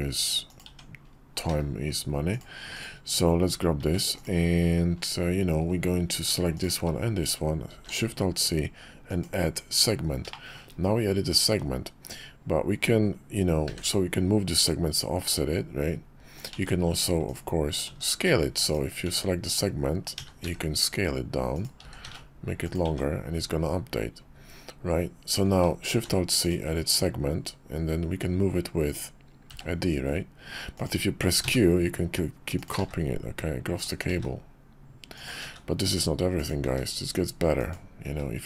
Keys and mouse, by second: 0.7 Tab, 1.5 q, 3.8 s, 6.5 shift+click, 7.7 alt+shift+c, 10.3-10.7 shift+drag, 10.7-17.4 middle drag, 17.9 Tab, 18.6 click, 19.0 Tab, 20.2 a, 20.4 s, 21.8 s, 22.8 Tab, 26.1 alt+shift+c.